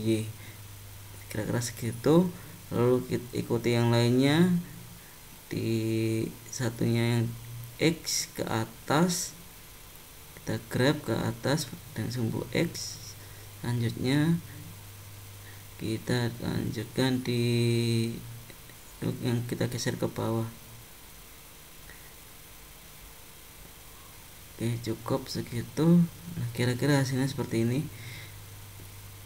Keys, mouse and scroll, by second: 3.0 click, 3.2 click, 5.3 click, 5.7 click, 6.3 click, 9.9 g, 13.7 click, 14.3 click, 16.1 click, 16.6 click, 17.1 click, 19.5 g, 25.4 click, 26.5 click, 27.3 click, 27.9 click, 28.7 click.